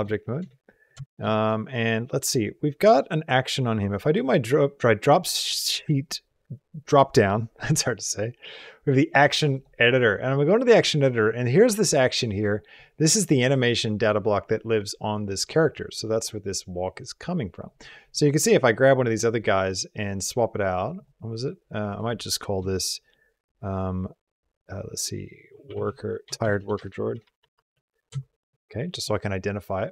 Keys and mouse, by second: 0.3 shift+middle click, 0.5 middle click, 0.8 shift+middle click, 1.1 middle click, 4.0-9.5 drag, 13.4 middle click, 15.8-17.5 drag, 20.8 click, 21.8-28.6 drag, 26.2 BackSpace, 26.4 BackSpace, 28.6 BackSpace.